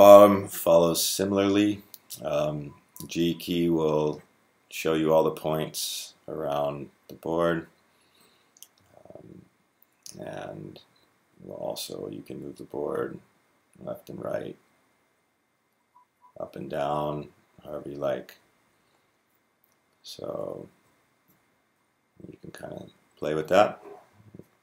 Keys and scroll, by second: 2.5-4.5 g, 4.7 g, 4.7 g, 5.0 g, 10.8 g, 11.0 Right, 11.2 Right, 11.3 Right, 11.9 Right, 11.9 Right, 12.1 Right, 12.1 Right, 12.2 Right, 12.3 Right, 12.4 Right, 12.5 Right, 12.5 Right, 12.6 Right, 12.7 Right, 12.8 Right, 15.9 Up, 16.2 Up, 16.7 Up, 17.4 Up, 17.8 Down, 18.0 Down, 18.7 Down, 19.5 Left, 20.2 Right, 20.4 Right, 20.7 Left, 20.9 Left, 21.0 Right, 21.3 g, 21.5 Left, 21.8 Left, 22.3 Left, 22.5 Left, 22.9 Left.